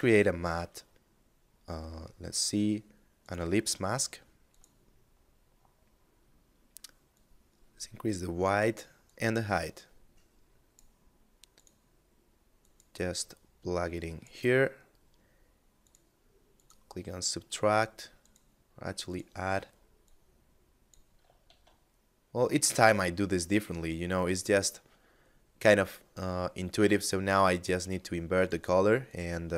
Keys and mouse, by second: 2.2 click, 6.2 click, 10.6 click, 15.0 click, 20.6 shift+a, 27.5 click.